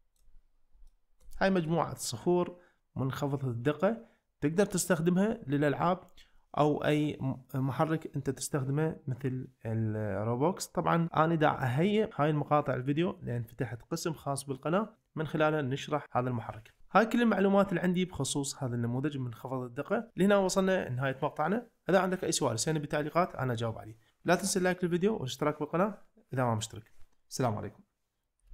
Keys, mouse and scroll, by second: 0.9 ctrl+middle click, 1.5 shift+middle click, 18.5 shift+middle click, 19.0-23.4 middle drag.